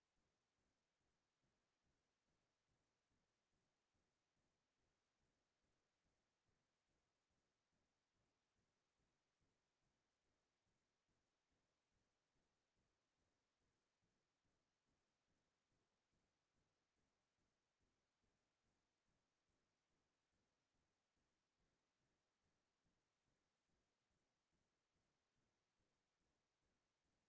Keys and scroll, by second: 16.1 ctrl+space.